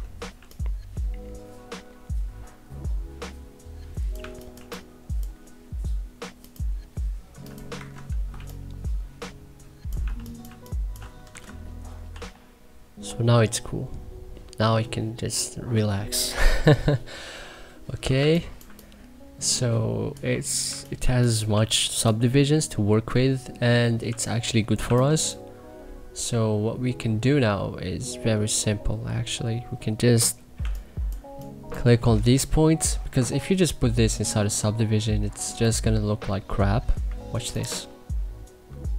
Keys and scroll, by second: 0.3 3, 4.1 1, 4.5 3, 7.7 Escape, 8.3 3, 9.9 1, 10.4 3, 11.2 c, 12.0 e, 18.1 2, 20.4-22.0 typing, 24.0 2, 24.8 1, 30.5 2, 32.2 w.